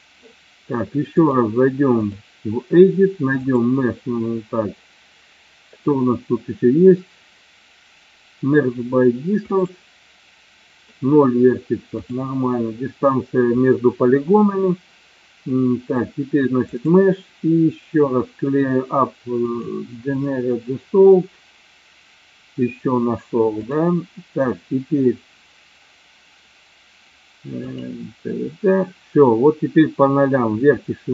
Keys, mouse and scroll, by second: 1.2 click, 3.4-9.7 drag, 12.0-15.9 drag, 16.7-19.8 drag, 23.5 click.